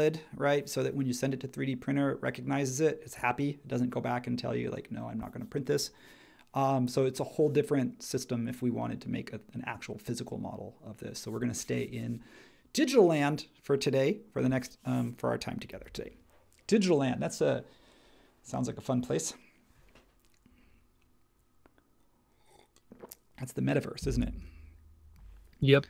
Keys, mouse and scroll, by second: 15.7 h.